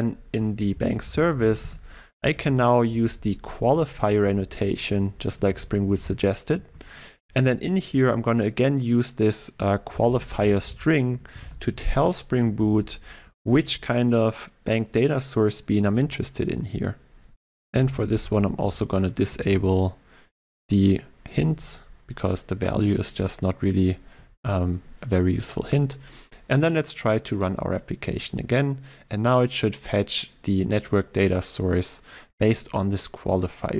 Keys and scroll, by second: 0.6 ctrl+e, 6.7 Return, 13.3 ctrl+w, 18.7 alt+Return, 27.4 shift+F10.